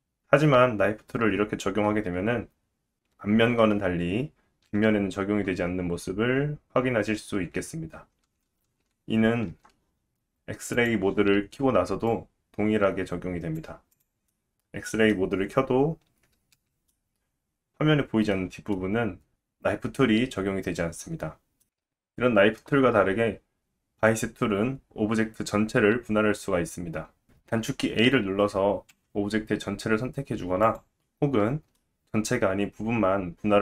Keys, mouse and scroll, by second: 8.2 ctrl+z, 8.5 ctrl+z, 9.5 Tab, 10.7 click, 12.1 click, 14.3 middle click, 21.7 ctrl+z, 24.3 click, 30.6 click, 31.8 middle click.